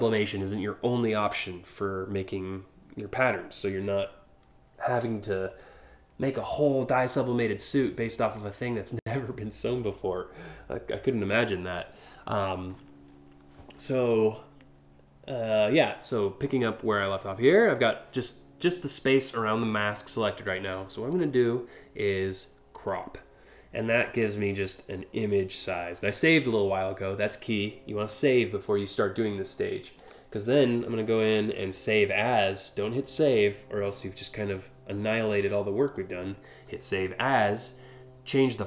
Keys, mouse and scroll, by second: 11.1 scroll up 1, 20.7 click, 22.3 click, 29.6 click, 35.4 click, 37.1 click.